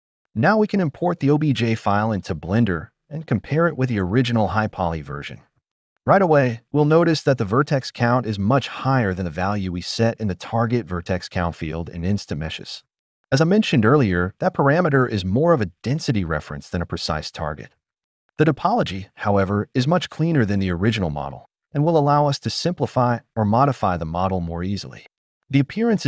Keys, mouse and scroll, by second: 1.1-3.8 drag, 11.6 click, 11.7-14.0 drag, 12.5 0, 12.7 -, 12.9 -, 15.1 click, 16.0 click, 19.3 Tab, 24.1 alt+click, 25.0 alt+click.